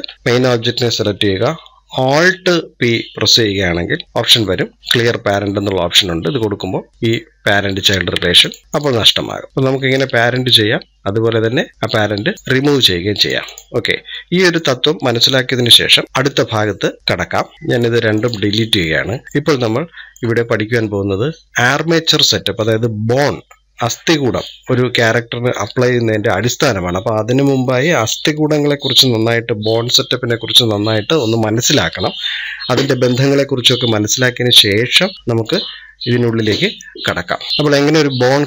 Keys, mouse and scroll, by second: 3.7 alt+p, 8.2-8.6 drag, 9.1 middle click, 9.8 click, 12.6-13.3 middle drag, 13.3-13.6 drag, 13.6-13.9 scroll down 2, 13.9-17.6 middle drag, 17.6 Delete, 18.0 click, 18.2 Delete, 19.2-20.2 shift+middle drag, 20.2 scroll up 1.